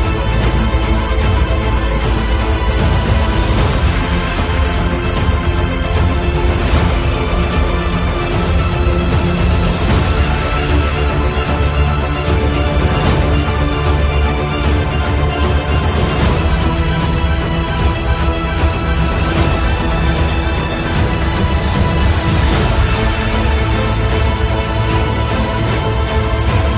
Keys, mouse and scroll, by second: 3.4-4.1 typing, 4.4 click, 6.9 click, 8.6 Delete, 9.8 click, 10.1 Delete, 11.8 click, 12.3 Delete, 16.4 click, 22.2 click, 22.3 click.